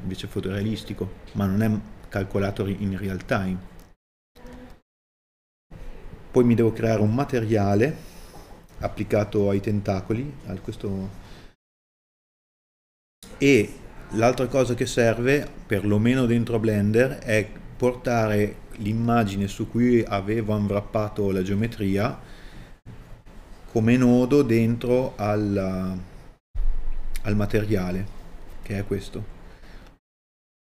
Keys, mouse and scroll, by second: 12.9 middle click, 23.6 middle click, 25.0 click, 30.6 KP_Divide.